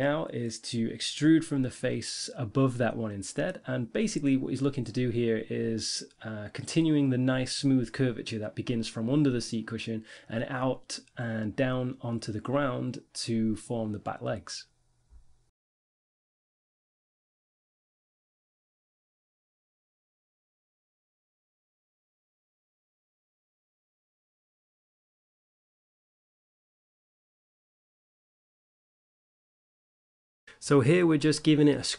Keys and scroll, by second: 7.2 ctrl+z, 9.9 5, 10.6 1, 11.6 e, 13.0 g, 16.4-20.0 typing, 21.6 z, 22.7 s, 24.5 a, 26.4 ctrl+r, 27.0 Tab, 27.8 1, 28.0 Tab, 28.4 ctrl+r.